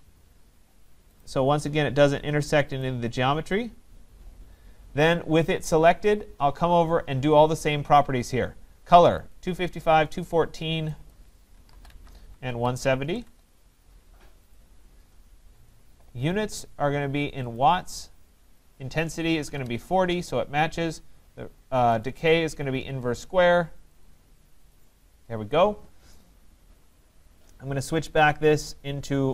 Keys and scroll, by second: 12.3 Tab, 20.0 Tab.